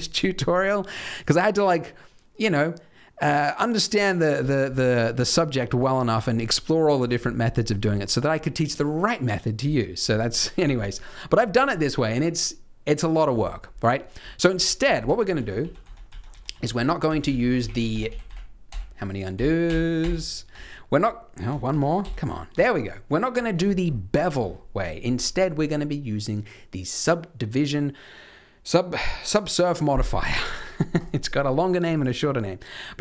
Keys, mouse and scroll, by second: 4.7 middle click, 5.3-5.6 scroll down 3, 5.6-7.3 scroll up 5, 7.5 shift+middle click, 9.9-10.5 scroll down 1, 10.7-13.0 scroll up 1, 13.0-13.7 scroll up 1, 13.7 scroll down 2, 14.4 ctrl+z, 14.8 ctrl+z, 15.0 ctrl+z, 15.3 ctrl+z, 15.5 ctrl+z, 15.8 ctrl+z, 16.0 ctrl+z, 16.2 ctrl+z, 16.5 ctrl+z, 16.7 ctrl+z, 17.0 ctrl+z, 17.2-18.2 ctrl+z, 18.6 ctrl+z, 19.3 ctrl+z, 19.6 ctrl+z, 19.9 ctrl+z, 21.7 ctrl+z, 22.0 ctrl+z, 23.6 scroll down 5, 23.9 middle click, 24.2 Tab, 24.2-24.7 scroll down 3, 24.7 scroll up 2, 31.0 click, 31.9 click.